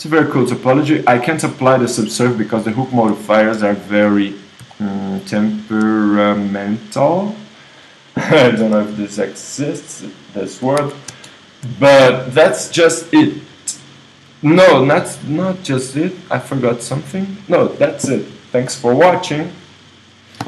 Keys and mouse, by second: 10.8 KP_1.